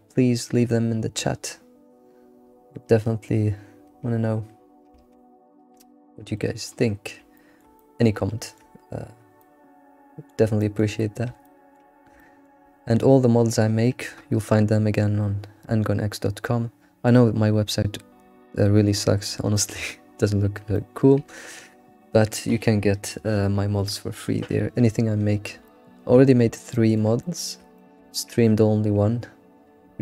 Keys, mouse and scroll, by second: 6.4-7.0 middle drag, 7.0-7.4 scroll down 2, 7.4-9.0 shift+middle drag, 9.0-9.4 scroll down 2, 9.4-11.1 shift+middle drag, 11.1-11.5 scroll up 2, 11.5-15.2 shift+middle drag, 19.6-20.1 middle drag, 20.1-20.6 scroll up 2, 20.8-23.8 shift+middle drag, 25.7-26.2 shift+middle drag, 26.3-26.6 scroll up 2, 26.6-30.0 shift+middle drag.